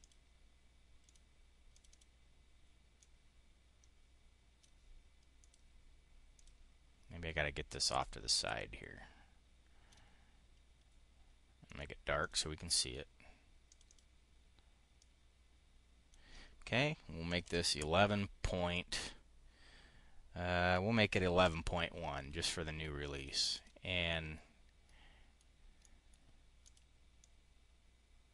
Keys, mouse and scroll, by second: 0.9 click, 1.6 click, 2.9-4.6 drag, 5.3 click, 6.2 click, 7.8-9.8 drag, 11.5 click, 12.1 click, 13.5 click, 14.8-16.1 drag, 17.1 1, 18.3 ., 21.3 1, 23.0 click, 23.3 click, 23.9-24.9 drag, 25.3 click, 26.1 click, 26.9-28.3 drag.